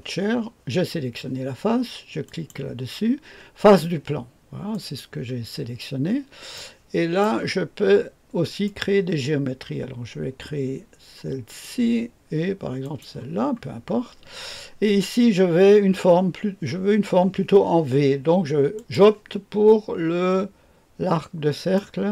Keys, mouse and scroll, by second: 2.2 click, 4.7 click, 6.0-7.2 scroll up 2, 6.5-7.2 right drag, 8.6 click, 11.5 click, 12.8 click, 18.7 click, 21.5 click.